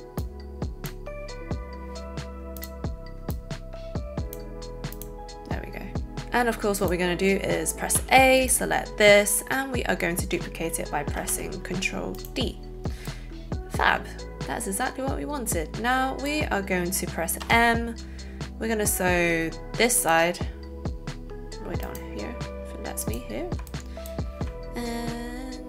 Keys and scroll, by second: 8.0 a, 11.1 ctrl+d, 17.3 m.